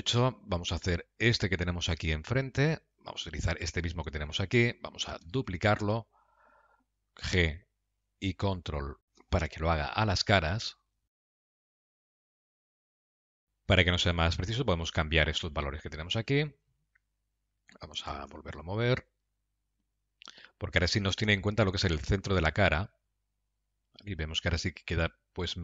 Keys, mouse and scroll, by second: 1.0 shift+middle click, 1.7 middle click, 3.2 shift+middle click, 5.5 shift+d, 11.0 KP_Decimal, 11.2 scroll down 5, 11.3 middle click, 11.6 g, 12.9 middle click, 14.3 click.